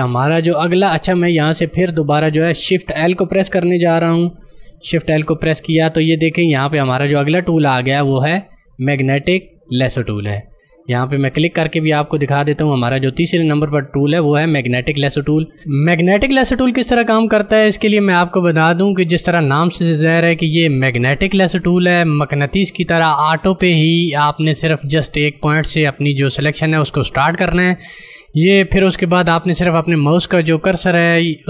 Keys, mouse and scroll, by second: 5.2 shift+l, 11.0 click, 18.4 click.